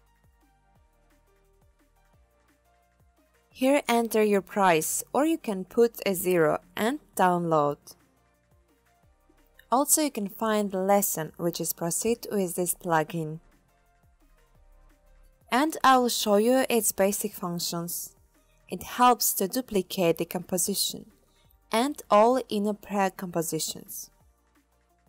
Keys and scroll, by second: 5.9 0.